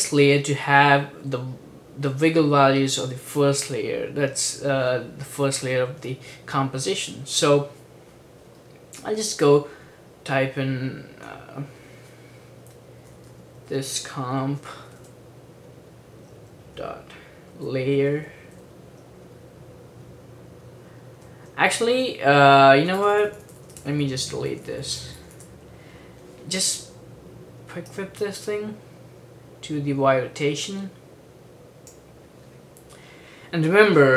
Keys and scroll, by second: 12.7-15.6 typing, 16.9-19.1 typing, 21.3 typing, 22.9-25.3 typing.